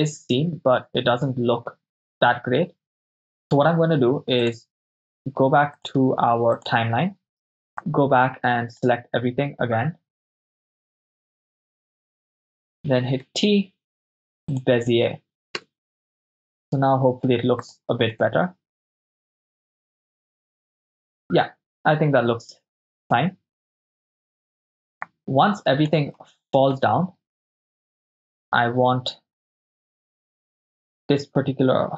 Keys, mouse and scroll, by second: 0.0 Right, 0.2 Right, 0.4 Right, 0.7 Right, 0.9 Right, 1.1 Right, 1.2 Right, 1.4 Right, 1.8 Right, 2.0 Right, 2.2 Right, 4.8 Right, 4.8-5.3 drag, 6.6 click, 8.0 click, 10.3 click, 10.6 KP_0, 10.9-11.7 shift+right click, 11.7-13.2 shift+drag, 13.2 t, 15.7 KP_0, 17.7 click, 18.3 shift+space, 23.3 shift+space, 24.0 middle click, 25.3-26.1 drag, 26.3 shift+space, 28.3 Left, 28.5 Left, 28.6 Left, 30.5 click, 30.5 right click.